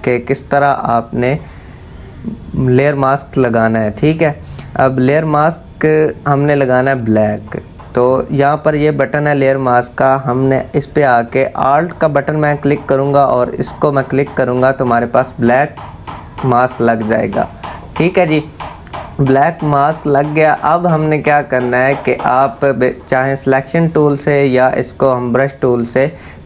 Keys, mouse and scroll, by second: 13.7 alt+click.